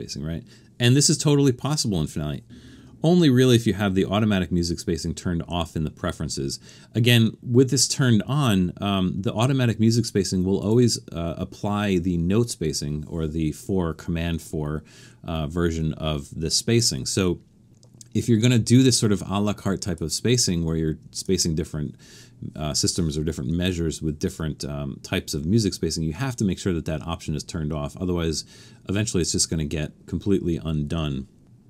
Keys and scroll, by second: 3.0 super+,.